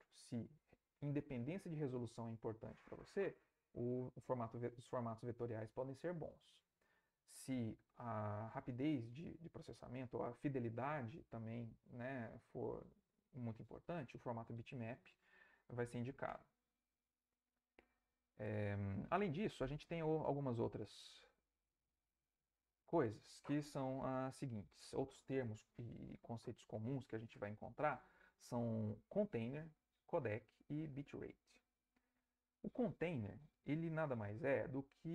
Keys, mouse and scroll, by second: 19.4 Left.